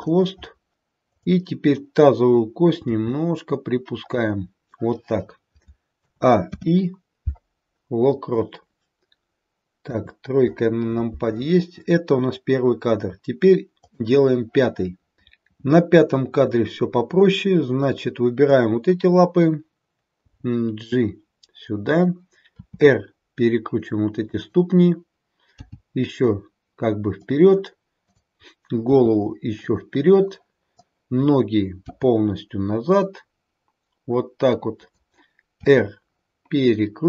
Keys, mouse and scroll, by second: 1.0 click, 2.8 g, 6.0 a, 6.4 i, 9.7 KP_3, 13.8 click, 16.5-17.7 scroll up 2, 17.7 click, 20.2 g, 22.4 r, 25.6 g, 27.9 click, 30.7 click, 30.7 r, 31.8 g, 35.7 r.